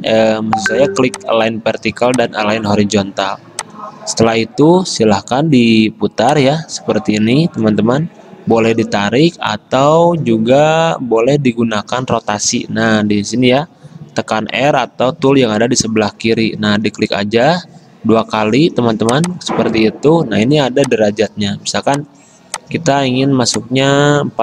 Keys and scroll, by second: 9.6 ctrl+z, 13.7 r, 24.3-24.4 typing.